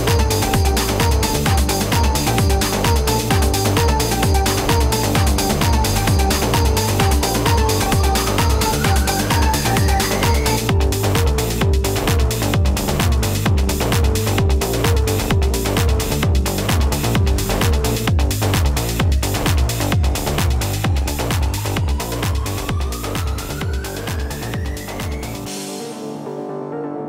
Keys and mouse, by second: 0.8 click, 2.2 click, 3.5 =, 3.7 space, 3.9 click, 4.0 space, 4.7 click, 5.8 click, 7.5 click, 8.1 click, 9.3 click, 10.8 click, 17.5 BackSpace, 19.8 ctrl+d, 23.6 BackSpace, 25.0 ctrl+d, 26.1 click.